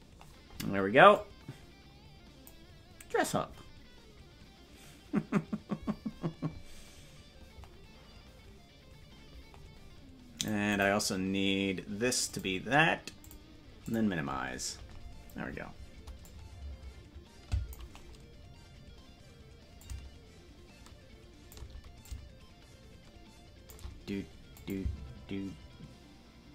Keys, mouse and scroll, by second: 16.4-17.9 drag, 19.8-21.6 drag, 22.0-23.8 drag, 24.6 click, 24.8 space.